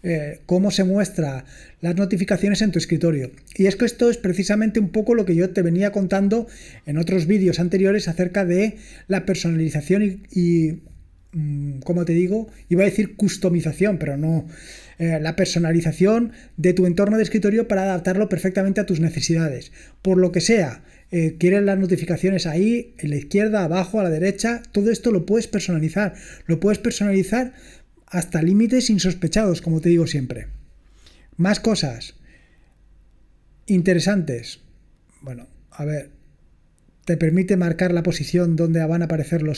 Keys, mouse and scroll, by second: 32.5-33.3 scroll down 2, 33.3 scroll down 1, 34.1-35.2 scroll down 2, 35.7-37.3 scroll down 3.